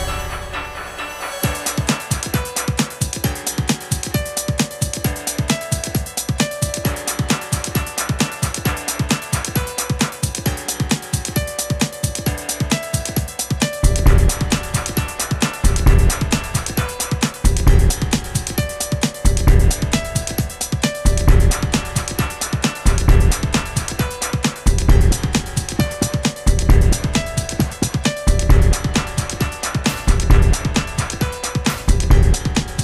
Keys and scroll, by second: 2.7 Left, 2.8 Left, 3.2 Up, 11.8 Right, 12.0 Right, 12.3 Right.